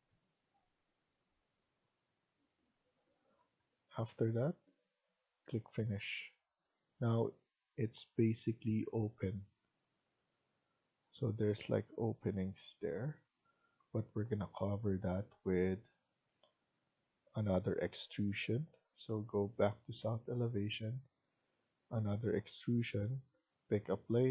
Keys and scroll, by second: 3.0 Escape, 3.3 Escape.